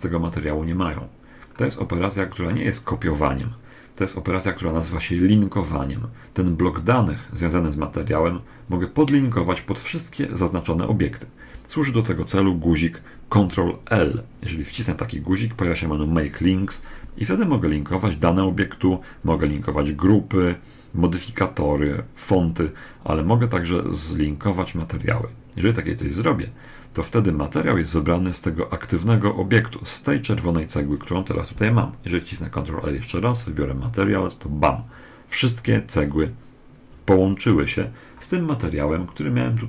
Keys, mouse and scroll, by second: 1.9-10.1 middle drag, 13.7 ctrl+l, 32.0 ctrl+l.